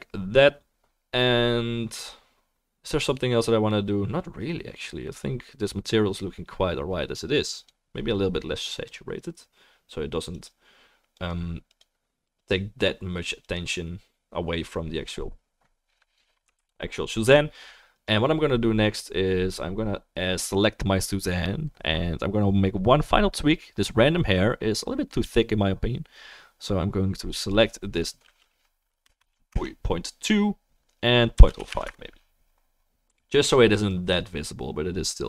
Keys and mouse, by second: 16.6 ctrl+s, 27.4-35.2 drag.